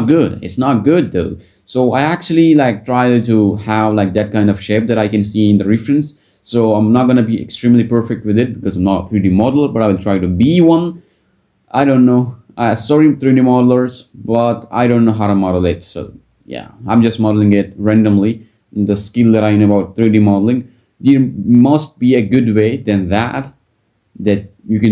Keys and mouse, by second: 0.9 Tab, 2.2 Tab, 4.4 ctrl+click, 5.1 g, 5.2 x, 5.4 z, 7.9 ctrl+z, 8.1 g, 8.2 x, 9.5 click, 9.9 ctrl+b, 10.8 a, 11.0 shift+n, 11.5 ctrl+click, 11.7 ctrl+b, 12.4 Tab, 12.9 drag, 13.4 Tab, 15.6 ctrl+click, 15.9 g, 16.0 z, 17.3 ctrl+click, 20.9 Tab, 22.5 drag, 24.5 Tab, 24.8 click.